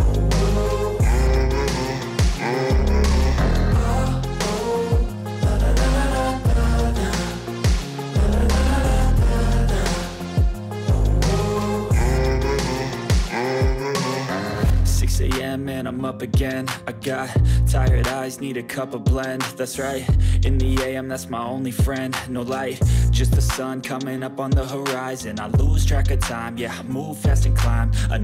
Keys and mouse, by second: 0.0-1.4 drag, 1.4 middle click, 2.0 click, 2.9 middle click, 3.4-6.7 drag, 10.0-12.1 drag, 12.6-14.6 drag, 15.0-17.0 drag, 17.1 click, 19.5-22.4 drag, 22.5 click, 24.0-25.3 drag, 25.3 middle click, 25.4 click, 27.1-28.2 drag.